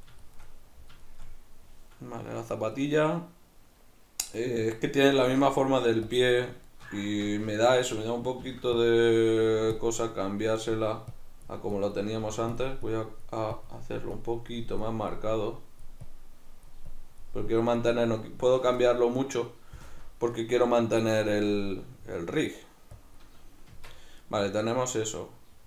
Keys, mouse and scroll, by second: 0.3 shift+middle click, 0.5 middle click, 1.1 shift+middle click, 1.3 middle click, 5.3 alt+q, 6.7 shift+middle click, 7.1 Tab, 7.6 ctrl+middle click, 8.5 f, 8.9 click, 9.5 f, 9.9 click, 12.2 click, 12.2 f, 18.8-23.0 middle drag, 19.8 KP_Decimal, 23.0-24.2 drag, 23.7 Tab, 24.2-25.6 middle drag.